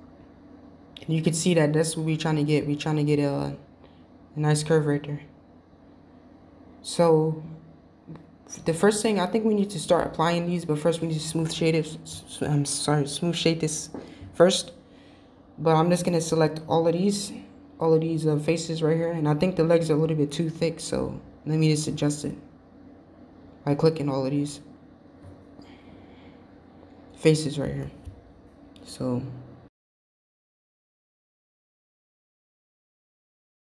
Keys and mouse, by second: 4.8 middle click, 6.8 middle click, 10.1 Tab, 11.4 Tab, 13.6 click, 14.7-15.2 shift+middle drag, 15.6 click, 16.5 shift+click, 17.6-18.9 middle drag, 18.9 shift+click, 19.5-20.4 middle drag, 20.4 shift+click, 20.8-21.4 middle drag, 21.7 shift+click, 22.3-24.0 middle drag, 25.8 shift+click, 26.9-27.4 middle drag, 28.0 shift+drag, 28.5 shift+drag, 29.1-30.2 middle drag.